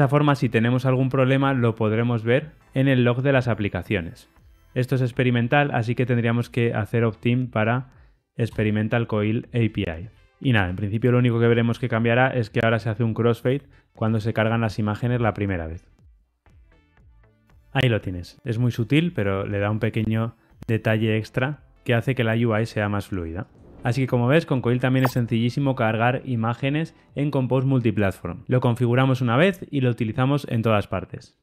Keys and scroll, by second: 5.3 alt+Return, 10.1 super+z, 11.0 ctrl+r, 11.0 shift+F10.